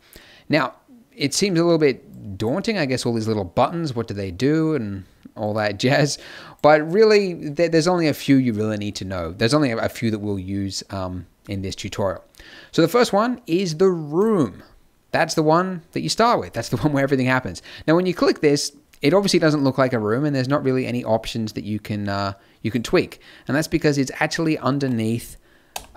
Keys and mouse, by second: 14.1 click, 19.1-20.8 middle drag, 20.8-24.4 drag, 25.7 n.